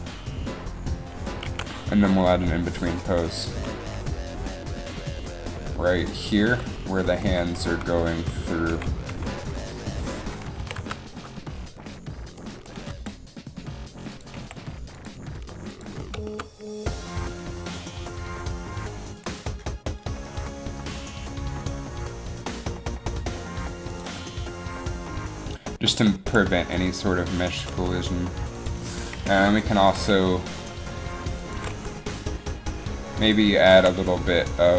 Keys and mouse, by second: 1.7 alt+a, 3.2 click, 3.7 Left, 4.1 Left, 6.3-6.6 Right, 6.8 Right, 7.1 Right, 7.3 Right, 7.5 Left, 8.0 Left, 8.3 Right, 8.8 Left, 9.2 Left, 9.6 Right, 10.8 a, 10.9 z, 13.1 g, 14.6 r, 15.5 g, 18.5 g, 18.5 r, 21.8 g, 26.8 r, 27.8 r, 29.2 KP_3, 29.9 r, 31.8 r, 33.9 a.